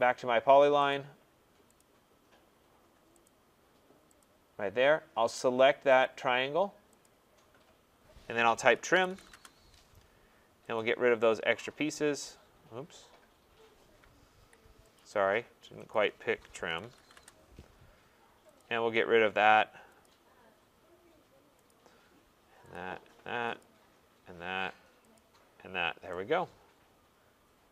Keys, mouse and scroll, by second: 0.9 click, 1.8 click, 3.3 click, 4.2 click, 6.0 click, 7.0 click, 8.7-9.8 typing, 10.7 click, 14.3 Escape, 14.9 click, 15.9 click, 16.5-17.5 typing, 18.5 click, 20.0 click, 21.6 click, 22.7 click, 23.6 click, 25.1 click, 25.8 scroll, 27.1 middle click.